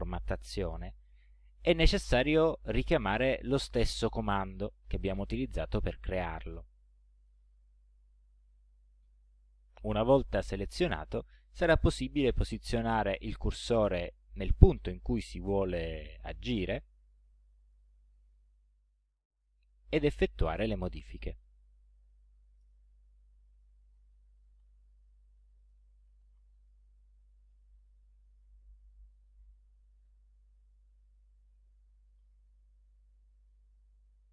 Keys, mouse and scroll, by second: 7.2 click, 13.6 click, 17.7 click, 20.8 click, 22.1 ,, 22.9 Return, 23.6-27.5 typing, 33.4 click.